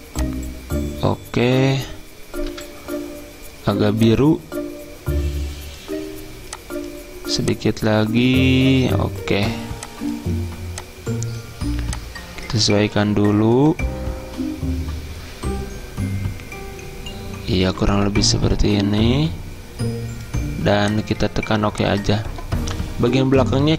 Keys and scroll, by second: 2.5 F10, 2.6 alt+Tab.